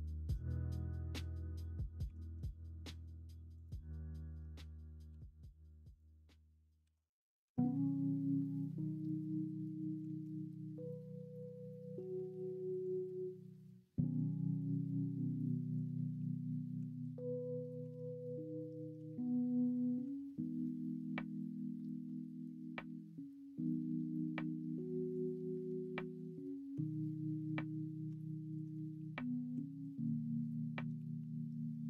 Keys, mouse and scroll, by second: 0.5 middle click, 2.0 3, 6.8 ,, 7.7 ., 10.0 s, 13.3 middle click, 15.5-16.1 scroll up 1, 16.7 s, 17.9 ctrl+z, 18.9 l, 20.0 s, 25.6 middle click, 25.9 click, 26.4 middle click, 26.5 click, 26.7 Tab, 28.0 Tab, 28.4 middle click, 29.5 s, 30.9 s.